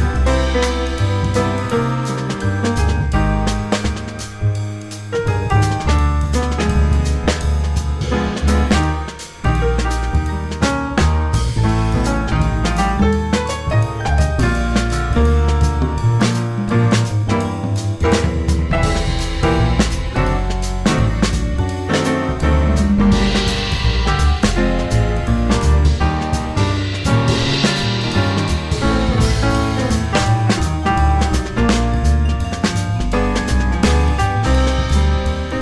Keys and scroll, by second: 3.9 F4, 7.2 2, 7.3 Return, 9.5 F3, 10.2 F3, 10.5 F3, 11.3 F3, 12.3 F4, 12.7 F3, 12.8 F4, 13.1 F3, 14.2 5, 14.6 r, 15.6 w, 15.7 F3, 16.4 1, 17.4 F3, 18.4 F3, 19.3 F3, 19.6 F3, 19.8 F4, 21.0 F3, 21.9 F3, 23.3 F3, 24.6 F3, 29.6 s, 33.8 s, 34.7 s.